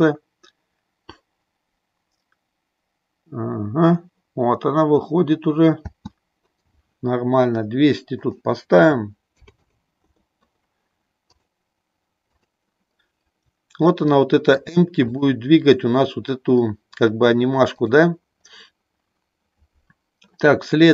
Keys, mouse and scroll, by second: 6.0 space, 8.3-10.3 drag, 9.5 KP_0, 11.2 click, 12.3 click, 14.1 shift+middle click, 15.1 click, 17.8 click.